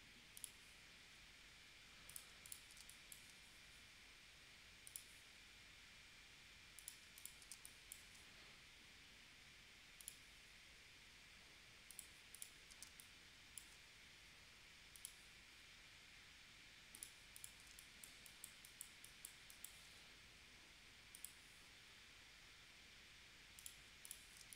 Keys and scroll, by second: 2.8 space, 7.5 space, 12.9 space, 17.7 space, 24.4 space.